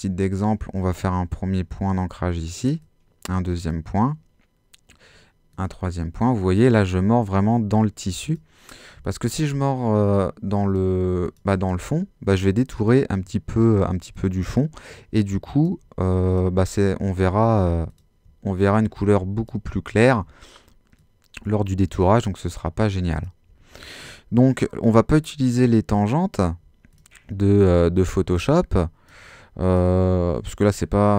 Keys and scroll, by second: 17.3 alt+super+z.